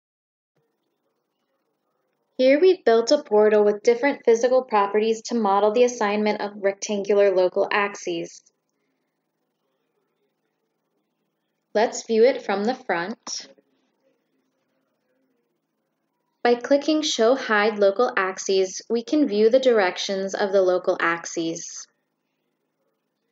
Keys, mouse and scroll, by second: 5.7 click, 11.3 click, 16.0 click.